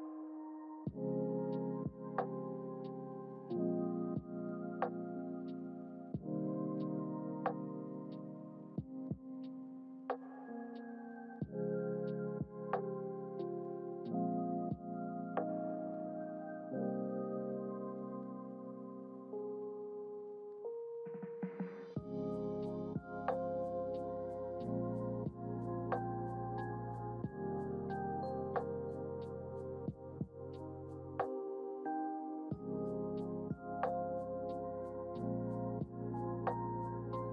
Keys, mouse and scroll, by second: 2.3 click, 3.2-9.5 drag, 10.4 click, 12.2 shift+d, 13.9 g, 17.8 ctrl+z, 18.1 ctrl+z, 18.4 ctrl+z, 21.1 click, 21.8 click, 23.8 click, 25.2-28.4 drag, 29.2-34.3 drag, 37.2 shift+d.